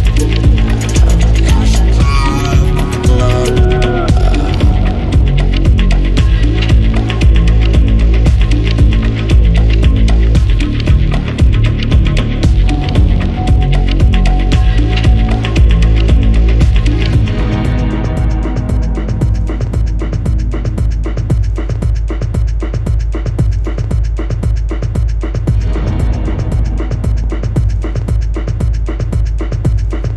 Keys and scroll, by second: 2.5 Escape, 9.5 Escape, 17.0-17.8 typing, 19.4-30.1 typing, 29.2 Return.